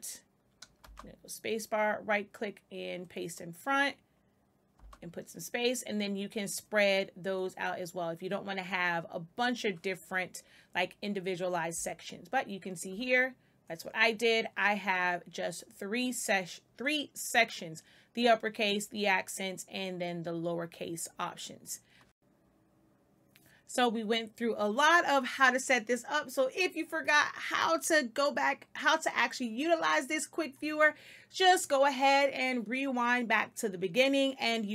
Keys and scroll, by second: 0.7 space, 4.7 space, 11.7 space.